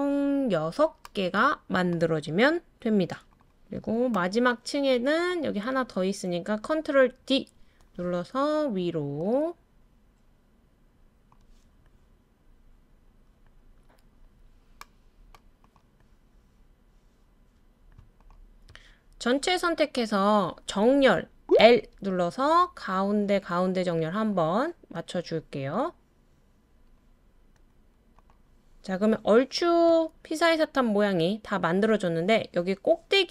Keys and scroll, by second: 7.2 super+d, 21.6 l.